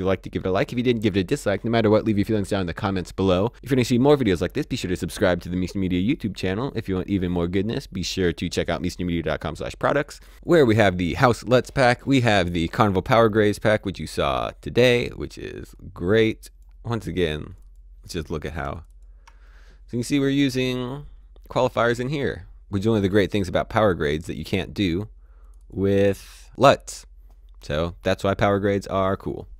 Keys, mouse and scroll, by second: 15.7 click, 18.7 ctrl+click, 21.8 click, 24.2 click.